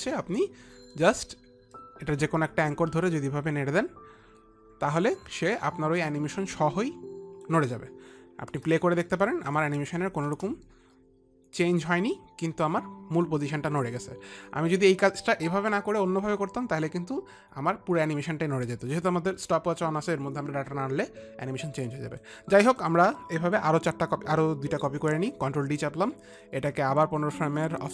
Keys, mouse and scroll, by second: 2.3 click, 9.1 click, 10.8 click, 10.8 space, 14.3 click.